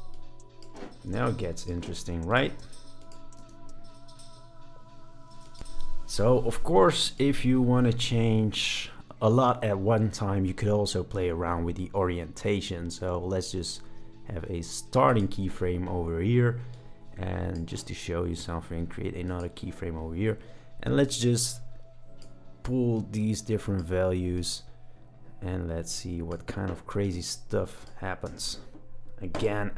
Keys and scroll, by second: 3.4 space, 5.3 space, 28.2 space.